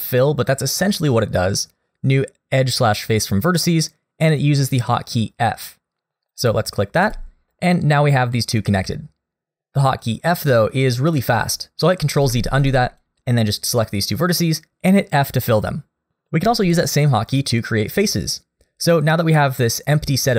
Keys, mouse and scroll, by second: 12.2 ctrl+z, 12.6 click, 13.0 click, 14.7 f.